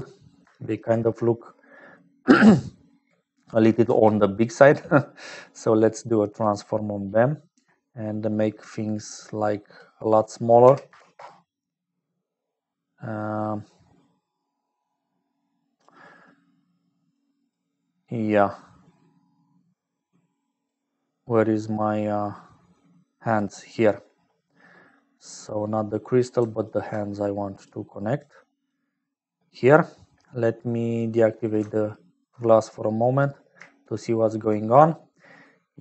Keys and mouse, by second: 3.3 middle click, 3.9 shift+a, 9.7-12.5 drag, 14.9 click, 17.1 click, 18.0 click, 20.0 click, 23.0 click, 24.6 click, 25.8 click, 26.6-27.6 alt+drag, 28.2 click, 30.8 click, 31.9 ctrl+alt+click, 34.1 shift+middle click.